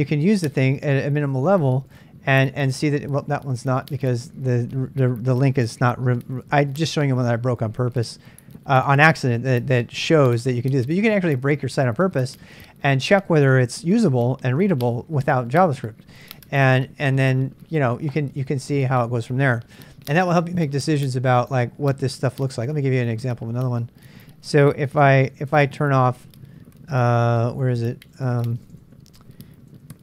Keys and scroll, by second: 25.0 super+Tab, 28.7 super+Tab.